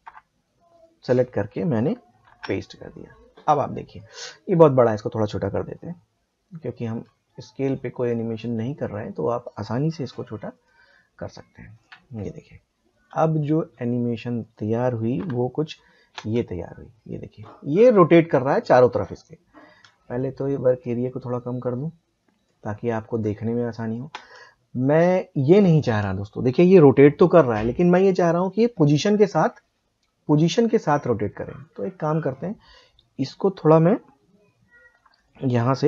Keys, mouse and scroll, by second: 0.0 p, 0.7 click, 2.2 ctrl+v, 6.8 s, 8.0-14.1 drag, 14.4 click, 14.5 click, 15.2 p, 16.1 space, 19.6 space, 20.8-24.1 drag, 24.1 space, 30.2-35.1 drag.